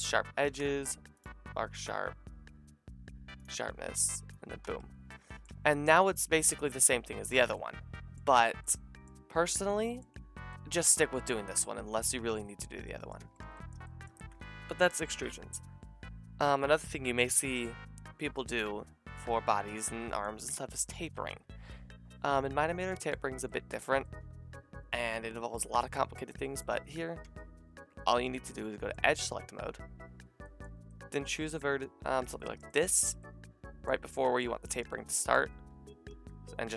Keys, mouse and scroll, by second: 0.4 ctrl+e, 4.6 Tab, 5.5 Tab, 5.9 a, 6.1 middle click, 6.2 click, 13.2 Tab, 13.7-14.5 drag, 14.5 KP_Divide, 21.0-27.8 drag, 27.2 Tab, 28.1 click, 28.1 a, 28.3 a, 32.1 alt+shift+click, 32.1 alt+shift+middle click, 32.1 alt+shift+right click, 32.6 middle click, 36.1 s, 36.5-36.7 drag.